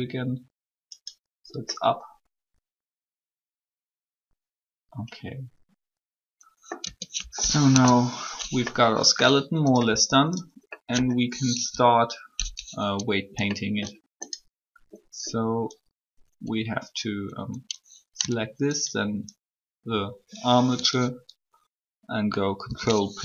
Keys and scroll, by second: 6.8 Tab, 7.7 3, 9.8 r, 22.4 ctrl+p.